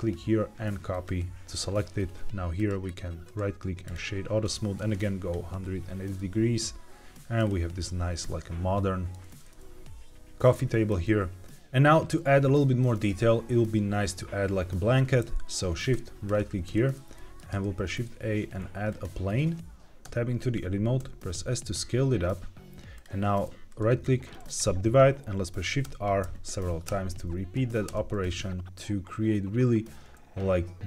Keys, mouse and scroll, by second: 2.5 click, 3.2-4.7 right drag, 4.7 click, 6.1-7.3 middle drag, 7.3-7.7 scroll down 2, 7.7-9.0 middle drag, 10.8-11.4 scroll up 2, 16.2 shift+right click, 16.7 shift+middle drag, 17.1 middle click, 17.5 shift+a, 20.0 Tab, 22.9 click, 23.6 right click, 25.8 shift+r, 26.1 shift+r.